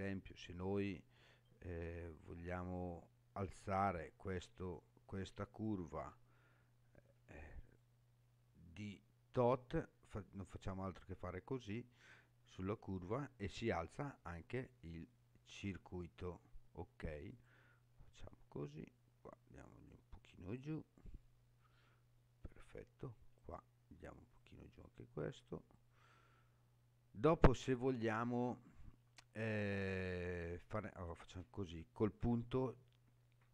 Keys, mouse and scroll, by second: 2.7 click, 4.6 shift+click, 5.5 shift+click, 7.6 click, 9.3-12.0 drag, 12.6-16.6 middle drag, 17.3 click, 18.7-20.5 drag, 21.0-22.4 middle drag, 23.4 click, 24.4-25.7 drag, 26.1-27.7 middle drag, 30.9 click, 32.2 KP_Decimal.